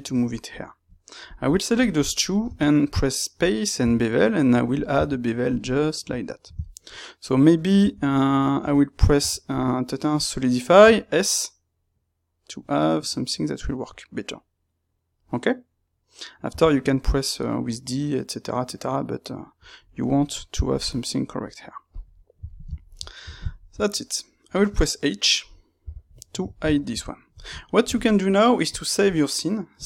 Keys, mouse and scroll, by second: 0.3 click, 0.4 middle click, 1.2 click, 1.7 shift+click, 2.0-21.9 middle drag, 21.9 click, 22.1-29.8 ctrl+middle drag, 25.7 h.